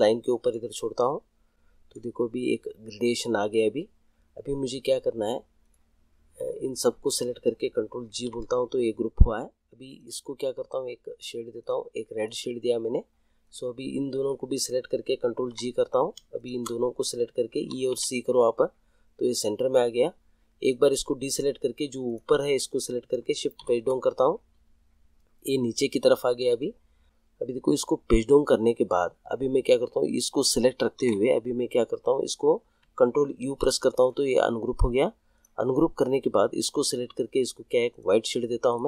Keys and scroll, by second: 8.1 ctrl+g, 15.3 ctrl+g, 17.6 e, 17.9 c, 23.5 shift+Page_Down, 30.9 ctrl+z, 33.4 ctrl+u.